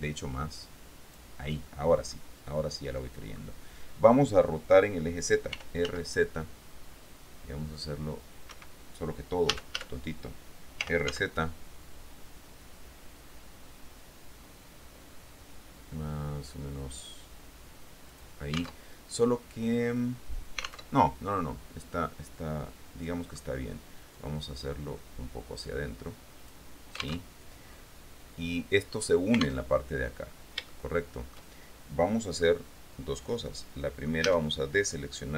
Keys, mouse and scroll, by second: 0.3-2.3 drag, 2.3 middle click, 2.9 click, 3.7 middle click, 5.7 r, 6.0 z, 8.7 Escape, 9.7 a, 11.0 r, 18.3 click, 19.0 alt+Tab, 21.1 alt+Tab, 22.1-24.0 drag, 24.3-26.8 drag, 27.3 alt+Tab, 29.9 alt+Tab, 30.9 shift+click, 32.6-34.4 drag, 34.4 a.